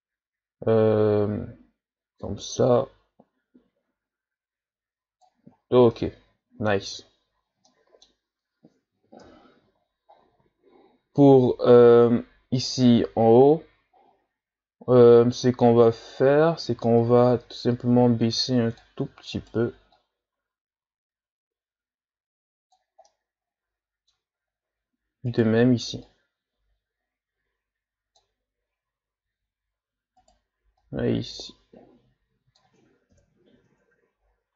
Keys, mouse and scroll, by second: 5.6-5.9 scroll down 2, 5.9-7.0 middle drag, 7.0 z, 7.7-9.2 middle drag, 9.2 KP_1, 10.1-11.6 shift+scroll up 6, 12.7 right click, 17.0-19.3 drag, 19.3 right click, 19.9-23.0 drag, 23.1-25.3 middle drag, 25.3 right click, 26.0-29.2 drag, 30.2 right click, 30.8-33.1 drag, 33.1 KP_1, 33.5 Tab, 34.2-34.5 shift+scroll down 8.